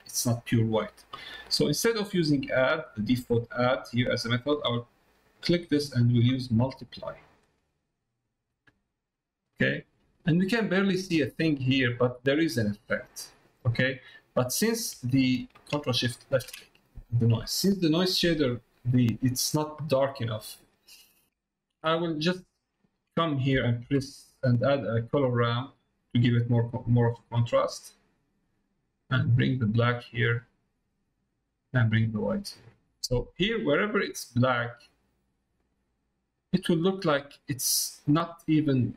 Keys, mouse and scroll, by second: 1.5 middle click, 2.4 middle click, 3.3 middle click, 5.1-7.1 drag, 9.7 middle click, 12.7 middle click, 14.2 middle click, 14.5 middle click, 20.4 middle click, 21.2 click, 21.5 ctrl+shift+click, 22.0 middle click, 23.2 middle click, 28.9-30.7 drag, 31.5-32.7 drag, 33.7-36.4 drag, 37.0 middle click, 38.1 middle click.